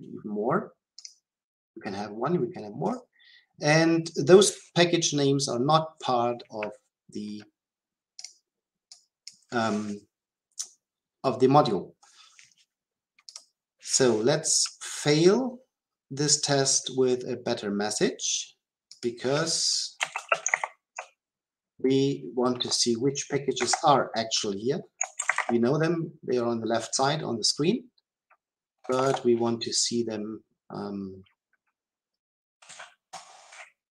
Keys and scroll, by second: 2.9 shift+F10, 20.5 ctrl+p, 33.1 Return.